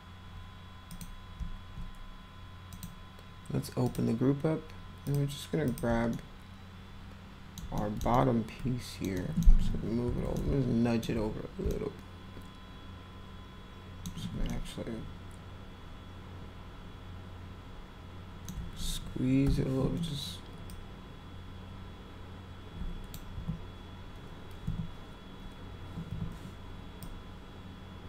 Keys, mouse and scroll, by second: 0.9 click, 2.7 click, 3.8 click, 5.0 click, 5.7 click, 6.1-7.5 alt+middle drag, 7.7 middle drag, 8.1 alt+middle click, 9.1 alt+middle click, 10.3 alt+middle click, 11.7-14.0 alt+middle drag, 14.5-18.5 alt+middle drag, 19.4 r, 20.7-23.1 drag, 23.4 w, 26.1 r, 27.0-28.0 drag.